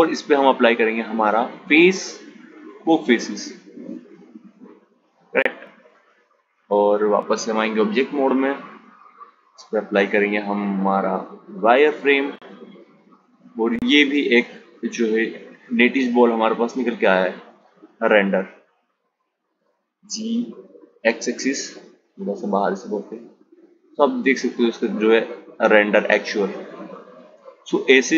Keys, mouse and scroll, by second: 5.9 Tab, 10.4 click, 12.6 click, 14.8 click, 15.8 click, 17.7 g, 22.4 click.